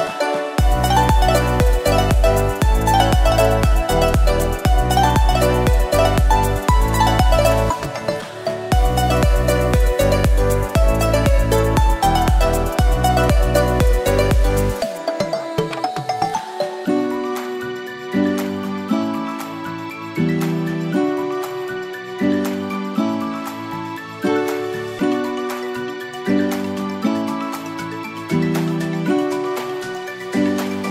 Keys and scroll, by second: 3.3 Return, 16.1 alt+BackSpace, 20.0 ctrl+d.